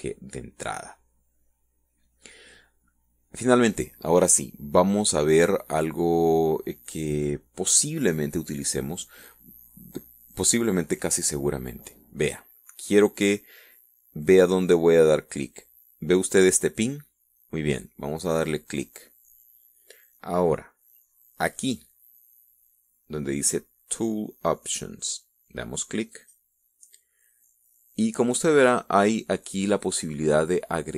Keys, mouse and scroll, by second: 19.3 click, 26.8 click.